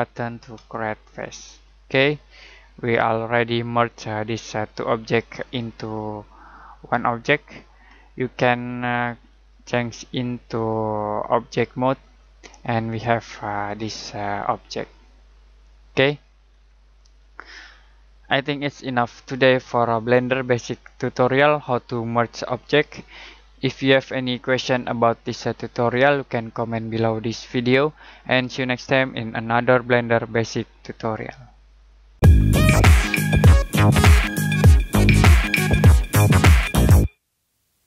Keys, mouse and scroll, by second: 0.5 f, 1.4 middle click, 9.3 click, 12.8-13.8 scroll down 1, 14.1 middle click, 16.1-16.5 scroll down 1, 16.5-17.1 scroll up 1, 17.8 middle click.